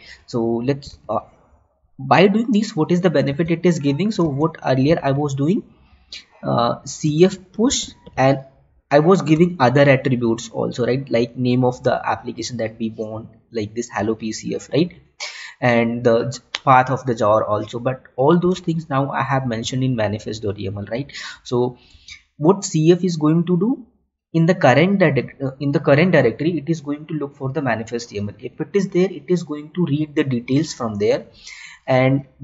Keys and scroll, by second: 1.3 Tab, 3.4 alt+Tab, 5.2 Tab, 7.2 space, 19.2 Tab, 22.5 Tab.